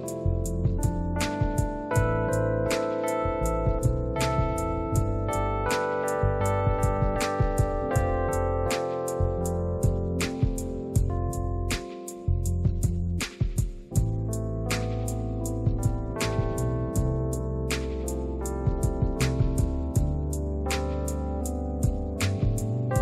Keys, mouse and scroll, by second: 5.4 click, 5.5 click, 10.1 click, 11.3 click, 11.5 click, 13.4 click, 14.3 click, 15.1 click, 15.6 click, 15.9 click, 16.3 click, 17.1 click, 17.8 click, 17.8 click, 18.0 click, 19.8 click.